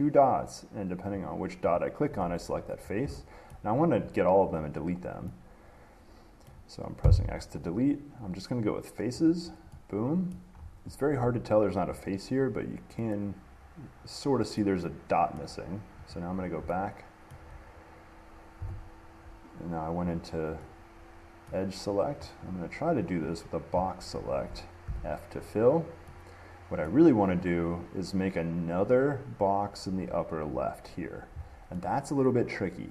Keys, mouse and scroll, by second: 1.5 click, 2.0 click, 3.0-3.3 scroll, 3.7 scroll, 4.7 click, 6.7 scroll, 9.5 click, 10.5 middle click, 10.8 middle click, 10.8 middle click, 11.3 middle click, 12.6-14.3 middle drag, 14.8-16.3 middle drag, 16.3 click, 16.6 middle click, 17.5 middle click, 20.8 click, 21.7-23.4 middle drag, 23.4-25.4 drag, 27.1-29.1 middle drag.